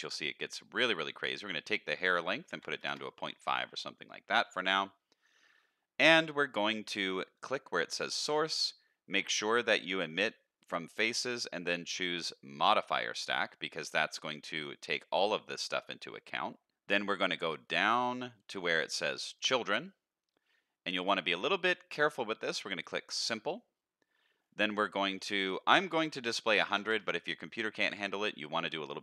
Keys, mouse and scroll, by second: 0.0 middle click, 1.7-2.9 drag, 3.8-4.3 middle drag, 5.5-6.8 scroll down 5, 6.8-7.3 scroll down 1, 7.3 click, 12.5 click, 14.3 click, 16.7 click, 16.7 scroll down 9, 17.6-19.3 scroll down 3, 19.3 click, 23.2 click, 24.4-24.9 scroll down 3, 25.1-27.0 drag, 26.8 KP_0, 27.9-29.0 middle drag.